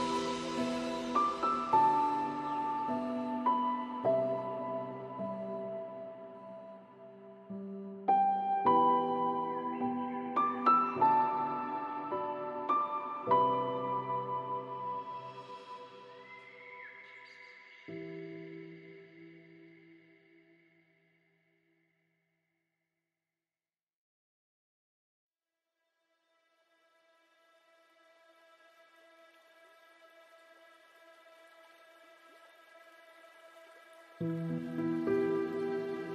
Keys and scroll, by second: 28.9 ctrl+z.